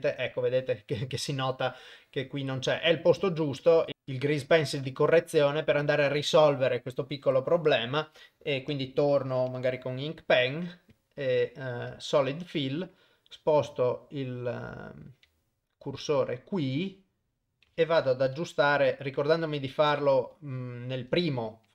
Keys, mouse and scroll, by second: 3.0 click, 3.8 ctrl+Tab, 8.8 click, 11.0 click, 12.0 click, 15.7 shift+right click, 19.5 shift+Left.